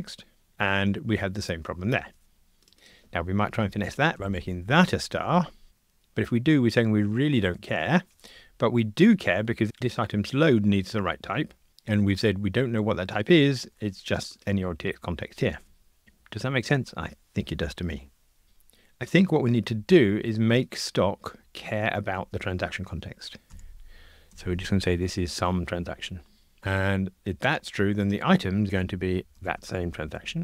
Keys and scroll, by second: 30.2 Escape.